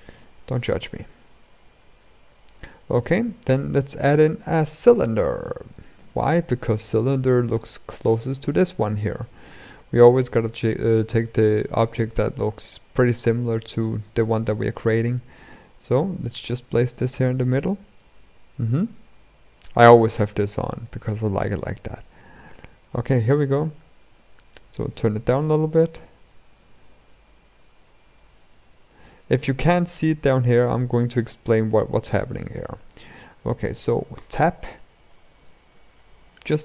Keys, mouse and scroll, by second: 0.7 r, 2.6-3.2 scroll up 2, 3.2-4.2 shift+middle drag, 4.2 click, 5.2 shift+a, 8.4 shift+a, 11.6 r, 12.9 s, 15.2 g, 17.6-18.6 drag, 21.3 scroll up 2, 22.1-22.6 middle drag, 23.9 s, 26.0 click, 27.5 click, 29.6-30.0 scroll down 3, 30.1-30.5 scroll up 2, 30.7-31.3 scroll down 3, 31.3 scroll up 1, 33.9 Tab, 35.1 ctrl+r.